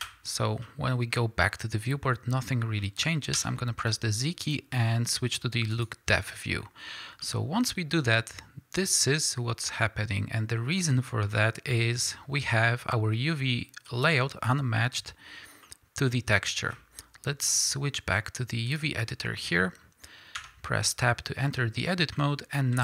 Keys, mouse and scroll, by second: 0.0 ctrl+space, 0.0-1.6 drag, 1.6-20.4 middle drag, 1.6-2.1 scroll down 2, 2.4-3.0 scroll up 2, 6.2 z, 6.8-7.2 scroll up 2, 12.7-13.4 scroll up 2, 13.4-14.1 scroll down 2, 20.4 Tab, 20.4-22.8 drag.